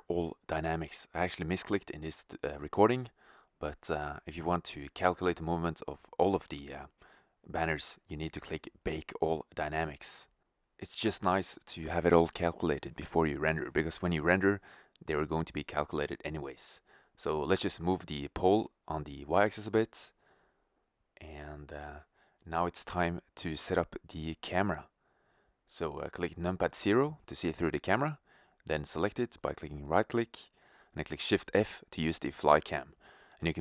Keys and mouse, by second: 3.5 middle click, 4.1-4.5 drag, 9.6-11.5 drag, 11.5-12.1 middle drag, 12.1-17.9 drag, 17.5 g, 26.3 KP_0, 29.5 shift+f.